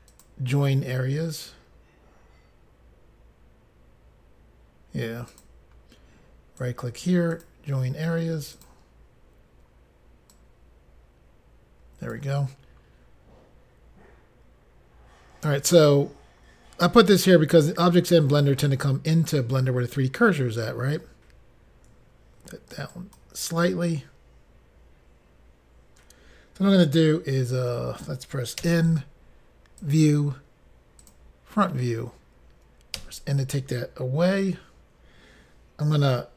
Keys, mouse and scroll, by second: 0.1 click, 0.2 click, 5.3 click, 6.6 right click, 7.3 click, 8.6 click, 8.7 click, 10.3 click, 18.1-19.3 scroll down 1, 22.9 shift+right click, 29.8 click, 29.8 n, 31.0 click, 31.1 click.